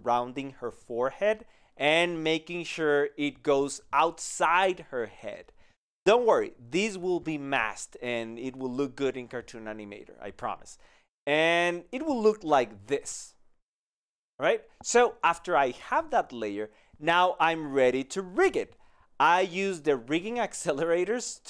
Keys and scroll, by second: 10.4 ctrl+alt+g, 14.8 ctrl+z, 15.5 ctrl+z, 17.0 ctrl+alt+g.